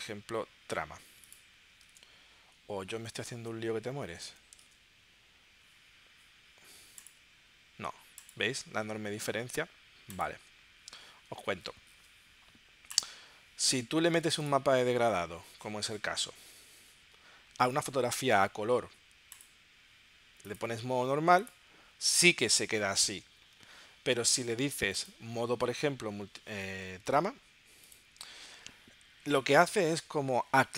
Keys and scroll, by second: 1.9 super+Tab, 3.3 space, 4.2 space, 4.7 super+Tab.